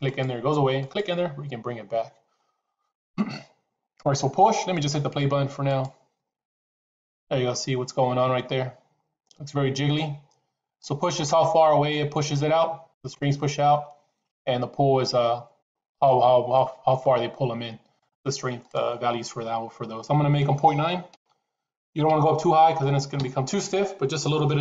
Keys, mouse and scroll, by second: 0.0 click, 0.7 click, 17.9 click, 18.6-24.6 drag.